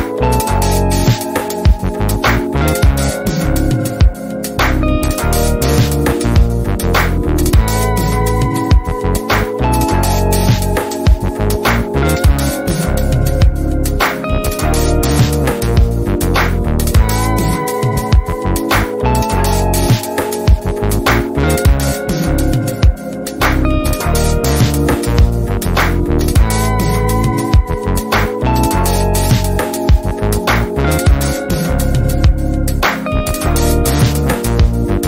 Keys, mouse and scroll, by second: 0.4 ctrl+scroll up 1, 0.9 shift+right click, 1.4 ctrl+scroll up 1, 2.4-3.7 typing, 3.6-6.1 drag, 6.0 F1, 7.8 click, 8.5 Escape, 8.9 click, 9.2 b, 9.8 click, 14.8 ctrl+shift+=, 15.4 F1, 15.9 click, 16.3 ctrl+c, 16.5 click, 17.0 ctrl+shift+v, 17.5 F1, 18.3-19.6 drag, 21.2 shift+right click, 21.7 ctrl+scroll up 1, 22.1 F2, 22.9-23.8 drag, 24.9 drag, 27.8 ctrl+z, 29.1-30.0 typing, 29.8-30.7 click, 30.6 F1, 31.0 shift+click, 31.6 F2, 32.2-33.5 drag, 33.6 ctrl+scroll up 1, 34.1 F1, 34.9-35.0 click.